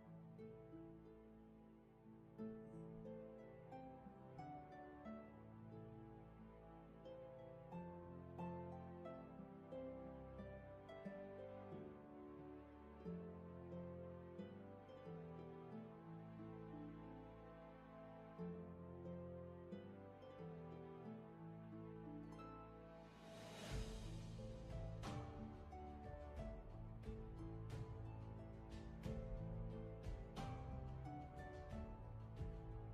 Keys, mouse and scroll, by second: 18.7-19.0 scroll down 1, 19.0-19.3 scroll up 1, 20.0 ctrl+z, 22.6-23.3 scroll down 1, 23.3 ctrl+z, 25.5-26.1 scroll down 1, 26.4 ctrl+z.